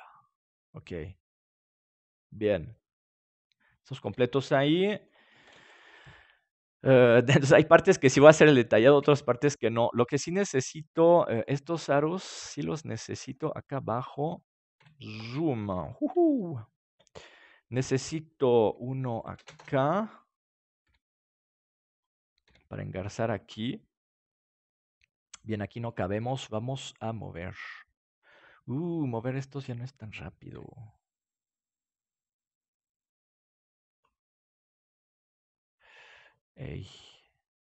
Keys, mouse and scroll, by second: 4.0 KP_7, 5.4 ctrl+s, 11.4-13.2 right drag, 13.2 shift+d, 14.7 KP_Decimal, 19.1-20.9 drag, 20.8 r, 22.3-23.6 drag, 22.4 g, 24.4-26.1 drag, 25.9 right click, 30.5 g, 34.0-35.6 drag.